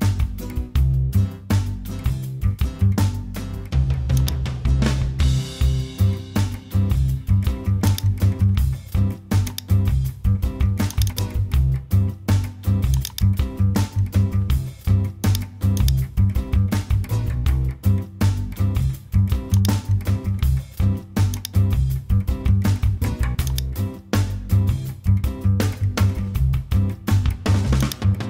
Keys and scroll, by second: 25.5 Return.